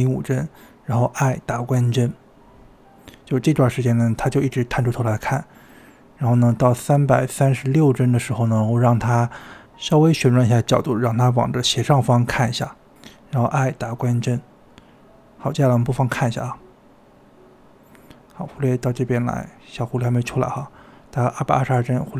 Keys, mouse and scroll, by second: 0.2-0.6 scroll up 3, 2.1 i, 4.2-5.8 drag, 5.8-7.2 middle drag, 7.4 KP_3, 8.6 KP_7, 9.7 KP_3, 9.9-10.3 scroll up 2, 10.3 r, 13.0 i, 13.7 i, 14.8-16.6 drag, 17.2 space.